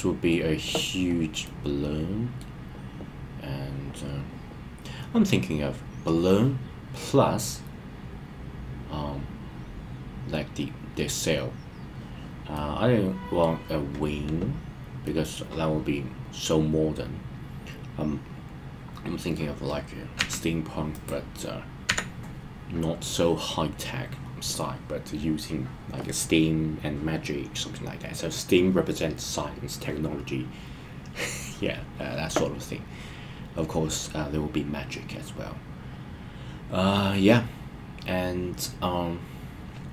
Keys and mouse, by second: 1.4-2.3 middle drag, 12.5-13.4 middle drag, 15.0-19.4 middle drag, 21.0 click, 21.8 KP_1.